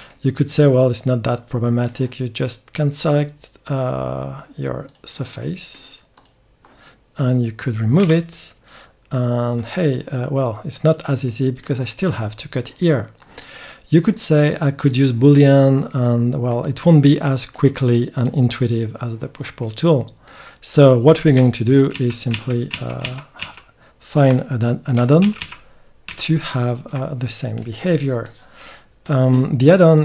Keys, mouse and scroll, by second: 0.1 middle click, 0.5 middle click, 3.0-4.7 drag, 4.7 right click, 4.9 click, 5.4 right click, 5.5-7.9 drag, 8.0 x, 10.8 click, 11.2 right click, 11.3 click, 11.5-13.5 middle drag, 21.9 ctrl+z, 22.3 ctrl+z, 22.4 middle click, 22.7 ctrl+z, 23.0 ctrl+z, 23.4 ctrl+z, 25.2 ctrl+z, 25.4 ctrl+z, 26.1 ctrl+z, 27.6 click.